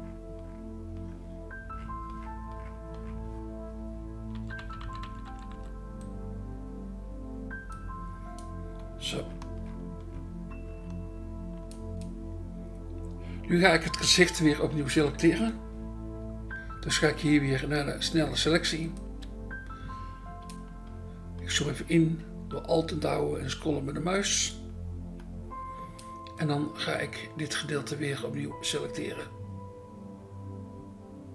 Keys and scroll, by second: 4.6-5.5 typing, 19.1 BackSpace.